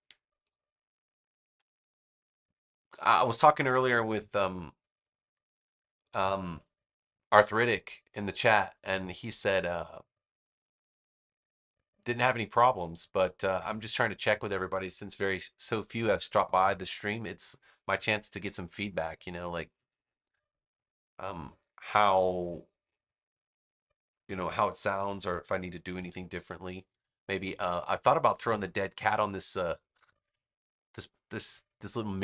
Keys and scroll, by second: 25.9 super+=.